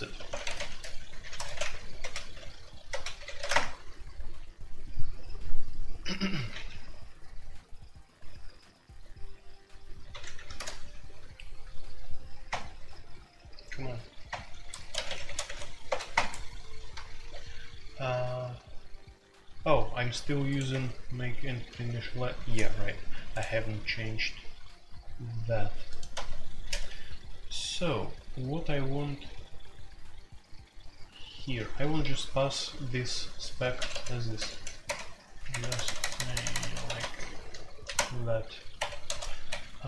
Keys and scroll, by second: 0.0-39.8 typing, 1.6 alt+0, 3.5 Return, 20.7 Escape, 21.7 ctrl+d, 26.1 Escape, 34.8 Tab, 37.9 Tab, 38.7 Escape, 39.4 Escape.